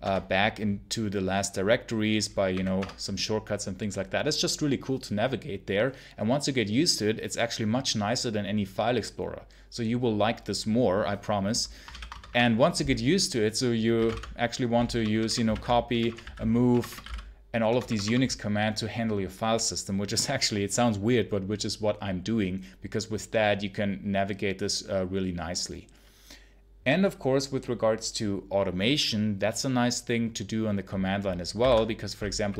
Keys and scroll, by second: 2.4 1, 2.6 Return, 11.7 ctrl+l, 12.0 ctrl+Return, 13.6-17.8 typing, 31.5-32.5 typing.